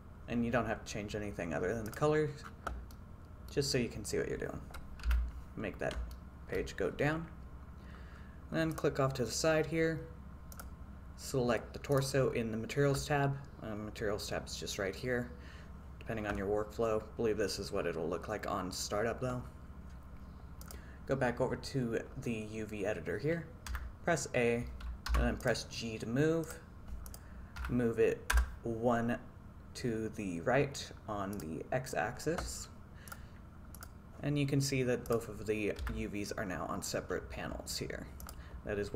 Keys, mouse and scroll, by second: 3.0 middle click, 5.2 n, 6.3 shift+middle click, 8.8 click, 10.6 click, 12.0 click, 23.8 a, 25.2 g, 25.5 click, 27.1-28.5 drag, 31.4 click, 33.1 click, 35.1 click, 35.9 a, 38.3 click.